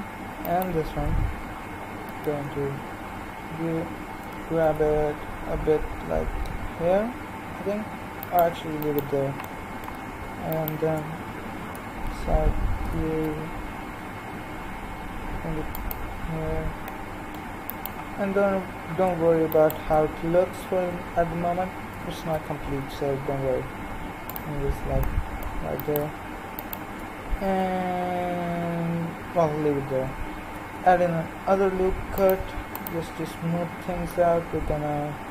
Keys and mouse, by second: 2.1 KP_3, 4.2 g, 11.6 KP_3, 12.8 g, 20.8 KP_3, 21.9 g, 25.8-27.4 drag, 27.4 KP_3, 30.7 ctrl+r.